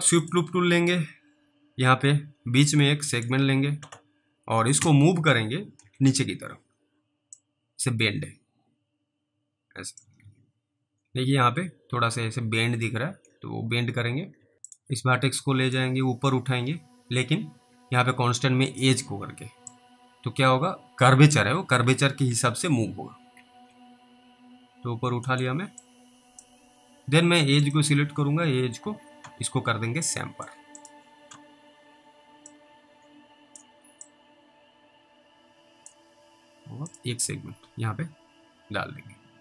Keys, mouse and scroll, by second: 0.3 click, 4.8 w, 5.4 w, 6.3-7.7 scroll up 1, 7.7 click, 10.2 alt+w, 14.4 alt+w, 14.7 click, 15.7 click, 18.8 click, 20.0 click, 21.9 alt+w, 22.3 alt+w, 23.4 alt+w, 25.4 middle click, 26.1 click, 26.7-27.3 scroll up 1, 27.7 click, 28.8 alt+w, 30.8 click, 32.8 click, 34.3 click, 36.9 click.